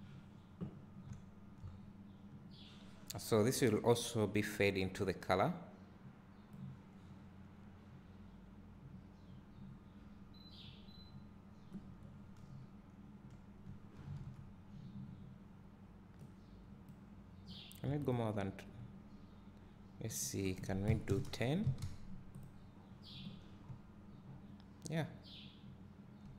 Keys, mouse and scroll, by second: 0.0 click, 1.4 `, 2.7-3.8 scroll up 1, 6.8-18.2 drag, 13.2 `, 22.5 click.